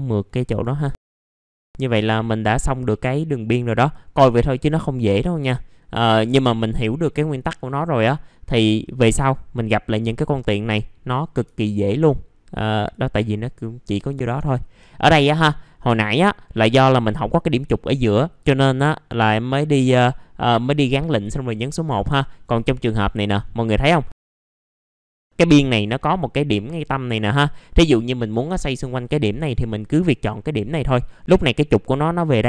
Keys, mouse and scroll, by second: 0.5 middle click, 1.0 scroll down 1, 1.4 middle click, 2.5-5.4 scroll down 1, 5.4-8.7 scroll up 1, 8.7-11.4 scroll down 1, 11.4 1, 11.7-12.5 scroll up 1, 12.7 click, 13.9 middle click, 14.6-15.1 scroll down 1, 15.8 middle click, 15.9-16.2 scroll down 1, 16.2 middle click, 22.2-23.2 scroll up 2, 23.2 middle click, 23.7 click, 25.1 scroll down 1, 25.3 middle click, 25.9-28.1 scroll up 1, 28.1-29.9 drag, 31.0-32.4 scroll down 1.